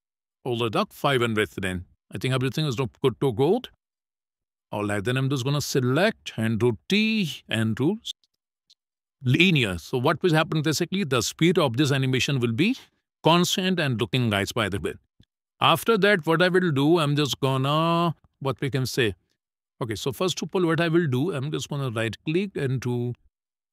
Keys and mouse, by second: 0.4 click, 3.8 a, 6.3 t, 10.8 click, 11.2 space, 14.3 space, 15.1 click, 15.8 middle click, 16.6 shift+middle click, 17.2 shift+middle click, 17.7 middle click, 18.5 shift+middle click, 19.0 middle click, 21.6-23.7 right drag.